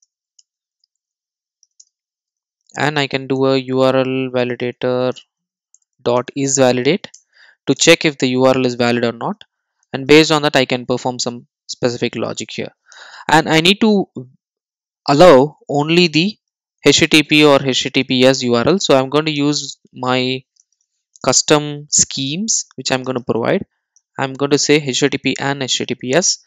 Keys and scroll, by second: 10.4 Tab, 22.5 Return.